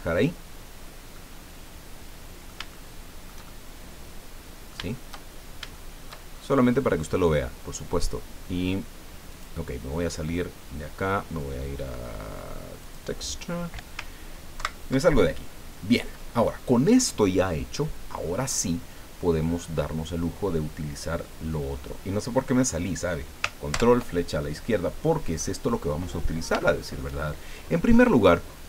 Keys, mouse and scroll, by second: 0.7 scroll down 2, 1.1-2.7 drag, 3.8-4.8 drag, 5.2 shift+scroll down 2, 5.7 shift+click, 6.3-6.9 shift+scroll up 2, 7.6 scroll down 1, 9.3 click, 12.8 click, 14.5 ctrl+Right, 23.7 ctrl+Left, 25.4 click, 26.2 scroll down 1, 26.7 shift+click.